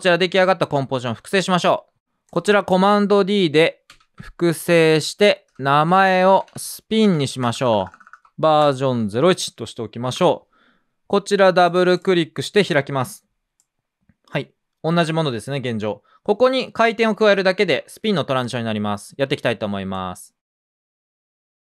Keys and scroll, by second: 2.0 Return, 2.0 Page_Down, 2.0 BackSpace, 3.9 super+d, 5.5 Return, 5.8 Up, 6.0 Right, 6.2 Right, 6.3 Right, 6.4 Right, 7.0 Right, 7.4-8.8 typing, 9.9-10.6 typing.